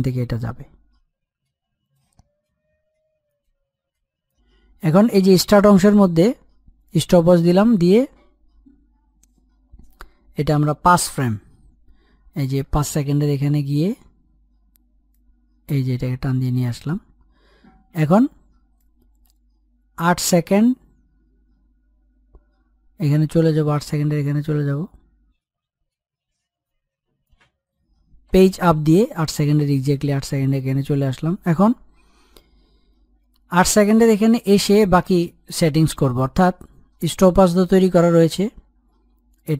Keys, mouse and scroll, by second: 3.1-6.4 drag, 6.6 click, 11.2 Page_Down, 13.6 alt+scroll up 1, 14.8-18.4 drag, 18.4-26.8 drag, 28.0 Page_Up, 30.2 alt+scroll down 1, 39.2-39.5 drag.